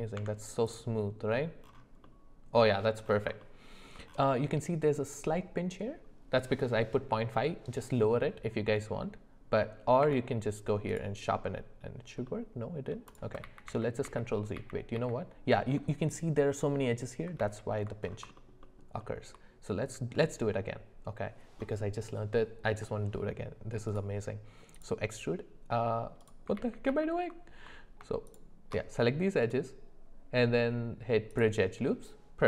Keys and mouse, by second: 0.2 Tab, 2.0 middle click, 3.4 shift+middle click, 10.0 q, 12.3-12.9 middle drag, 13.1 click, 13.4 ctrl+z, 13.7 ctrl+z, 14.1 ctrl+z, 14.6 ctrl+z, 15.0 ctrl+z, 18.4 alt+middle click, 18.6 alt+middle click, 23.9-26.2 right drag, 26.6 ctrl+z, 26.9 ctrl+z, 28.3 alt+shift+click, 29.4-31.4 right drag.